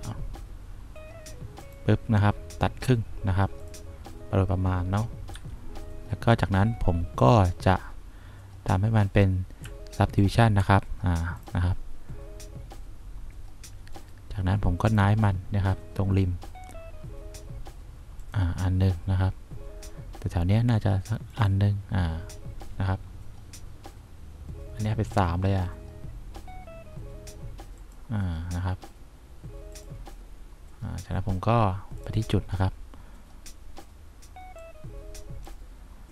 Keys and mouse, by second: 5.5 F2, 15.0 click, 18.3 click, 21.4 click, 35.1 click.